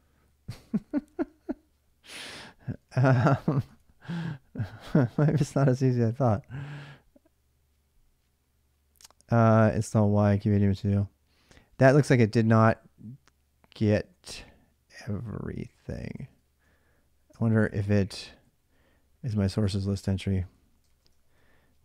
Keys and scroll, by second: 2.7 alt+Tab, 3.5 alt+Tab, 4.9 ctrl+a, 5.0 ctrl+a, 16.0 ctrl+a, 17.2 ctrl+[, 17.3 k, 17.5 k, 19.5 Return, 19.5-21.8 typing.